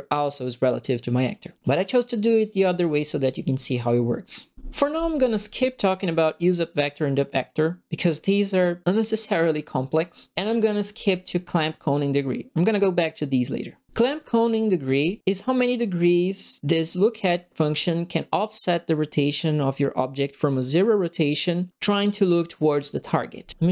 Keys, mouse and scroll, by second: 1.3 click, 1.6 right click, 2.7 middle click, 4.3 right click.